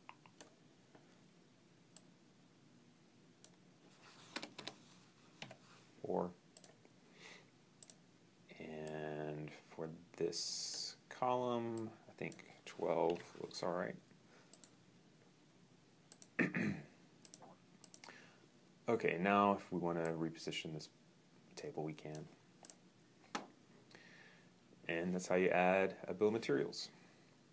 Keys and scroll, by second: 4.3 BackSpace, 5.2 4, 12.9 2.